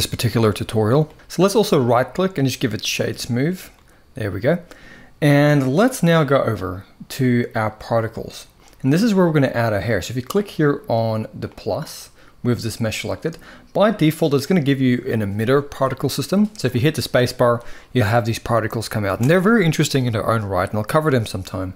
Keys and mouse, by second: 0.0-0.8 middle drag, 1.6-2.8 right drag, 3.4-4.6 middle drag, 7.5 click, 11.2 click, 16.8 space, 18.8 space.